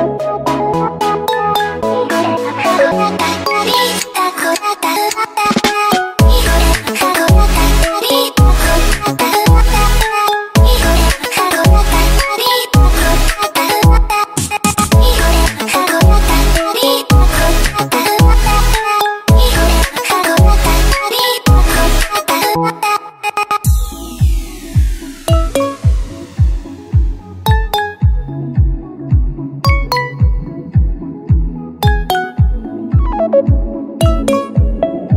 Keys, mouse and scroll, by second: 11.0 super+z, 16.5 super+z, 25.2 super+z.